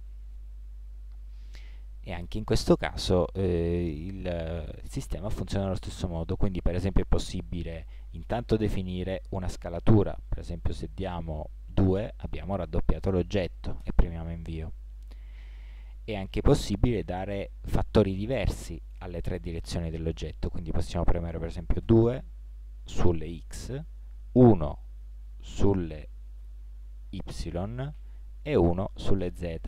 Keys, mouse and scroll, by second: 15.4 ctrl+z, 17.1 s.